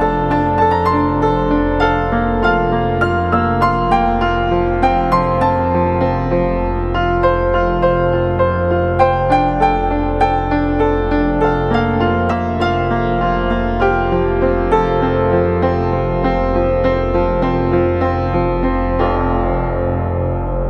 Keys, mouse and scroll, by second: 18.1 alt+click.